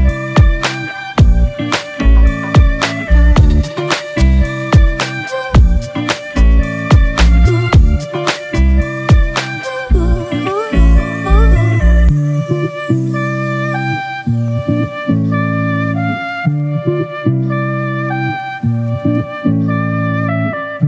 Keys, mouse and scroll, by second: 0.0 double click, 1.6 [, 2.0 [, 4.2 [, 4.2 double click, 5.5 [, 8.8 [, 8.9 [, 13.1 double click.